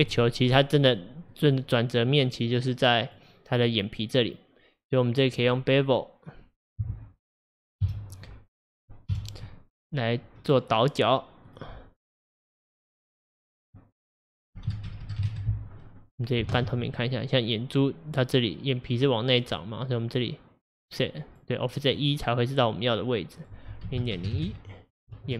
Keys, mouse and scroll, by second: 1.4-3.1 middle drag, 3.1 click, 3.7-6.7 middle drag, 7.9 KP_Divide, 8.8 middle click, 9.2 KP_Divide, 10.0 scroll up 1, 11.5 click, 12.6-15.1 drag, 15.1 KP_0, 16.6 alt+z, 16.9-20.0 middle drag, 20.0-23.0 drag, 23.5-25.3 drag.